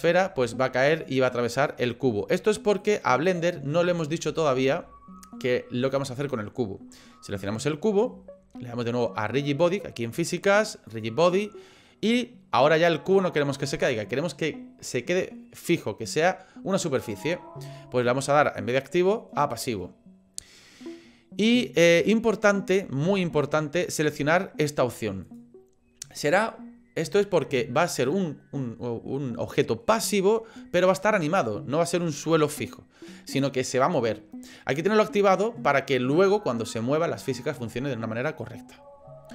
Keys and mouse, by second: 1.9 middle click, 2.9 click, 3.2 click, 3.7 middle click, 4.4 shift+middle click, 7.3 click, 10.9 click, 18.5-19.6 drag, 25.2 click.